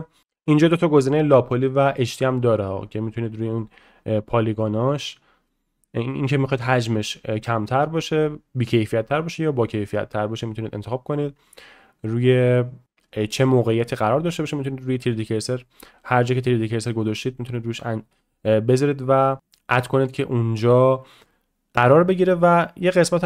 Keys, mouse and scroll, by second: 15.0-23.2 drag.